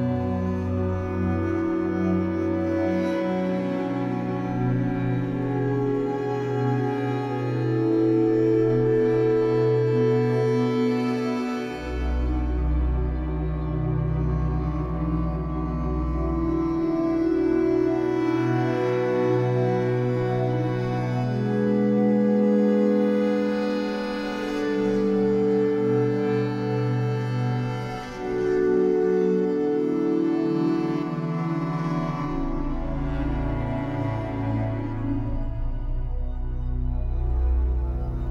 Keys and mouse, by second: 0.8 click, 1.3 click, 3.5 click, 3.8 click, 5.9-11.7 drag, 14.9-15.6 alt+drag, 17.9 space, 19.8 click, 21.2 click, 23.0 shift+click, 25.5 space, 26.0 shift+click, 31.0 space, 33.0-33.3 drag, 34.5 click, 35.8 click.